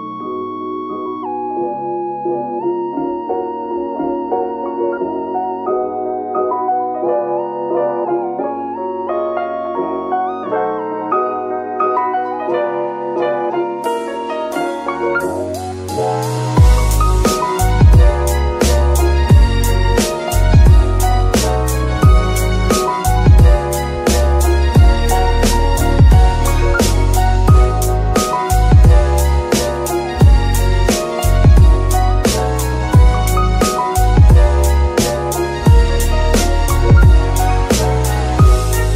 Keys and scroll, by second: 2.2 z, 13.1 z, 22.5 g, 25.0 Escape, 31.7 g.